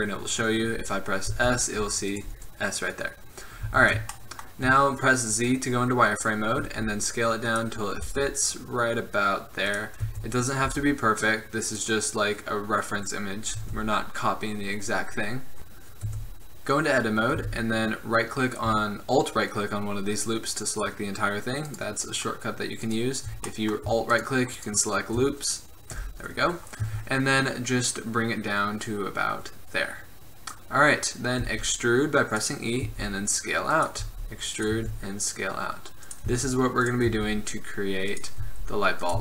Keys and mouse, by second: 1.5 s, 3.7 z, 6.8 s, 8.2 g, 10.2 s, 10.8 g, 13.8 Tab, 16.2 Tab, 17.5 Tab, 26.1 KP_1, 31.6 e, 33.0 s, 34.2 e, 34.9 s, 36.5 e, 37.2 s, 38.6 e.